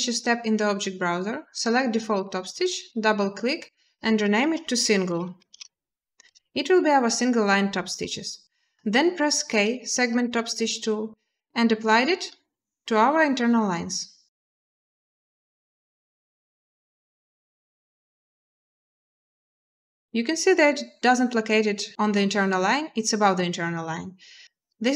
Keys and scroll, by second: 4.1-6.0 typing, 9.4 k.